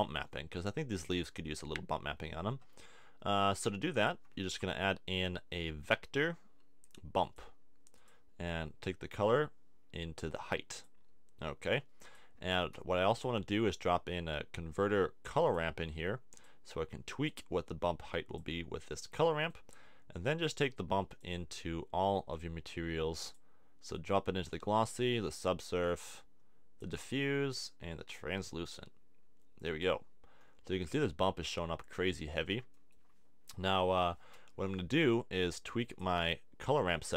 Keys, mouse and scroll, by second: 4.3 shift+a, 8.1-10.8 drag, 11.8 click, 12.7 shift+a, 16.4 click, 19.2 click, 35.1 click.